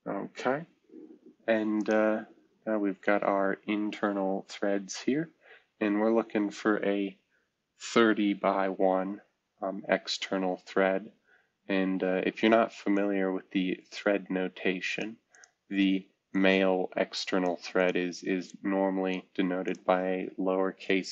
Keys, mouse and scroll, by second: 4.1-5.5 scroll up 2, 5.7-7.9 scroll up 3, 8.7-10.9 scroll up 3.